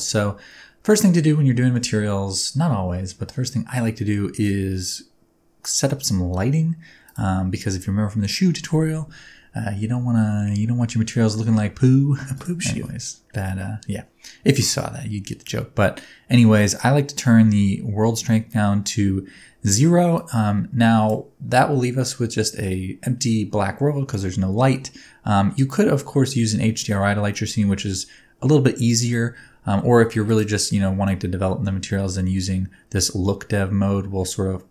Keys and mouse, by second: 0.5-0.9 middle drag, 1.6 shift+middle click, 2.0-3.0 middle drag, 7.0 right click, 20.2 click, 21.7-22.6 middle drag, 23.3-23.8 middle drag, 31.1 middle click.